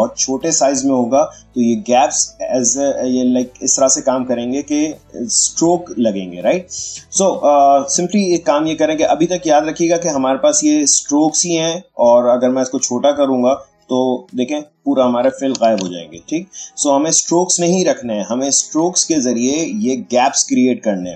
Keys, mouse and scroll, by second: 7.4-11.3 drag, 12.4-14.2 drag, 15.6 ctrl+z.